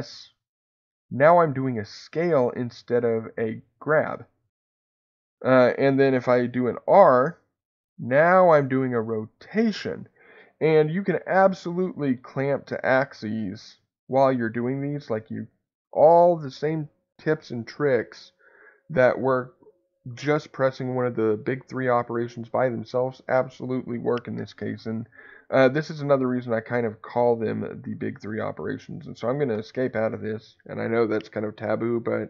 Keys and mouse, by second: 13.4 x, 29.5 Escape.